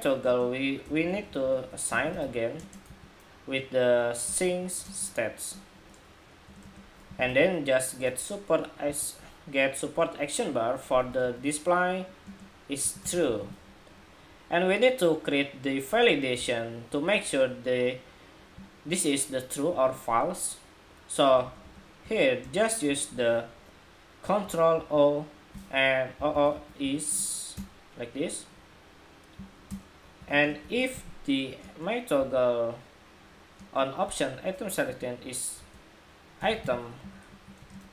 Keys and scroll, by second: 24.4 ctrl+o.